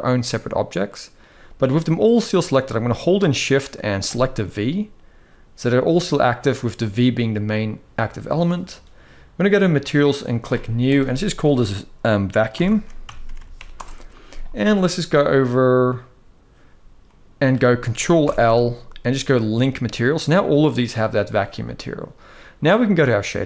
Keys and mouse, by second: 1.6-1.9 middle drag, 3.7 shift+click, 5.6-6.0 middle drag, 10.5-13.4 drag, 13.0 u, 16.8 middle click, 17.8 ctrl+l.